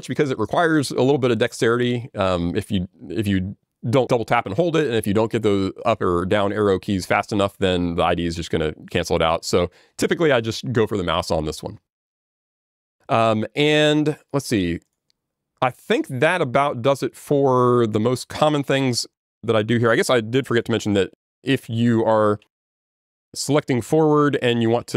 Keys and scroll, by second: 22.8 alt+j, 22.8 ctrl+g.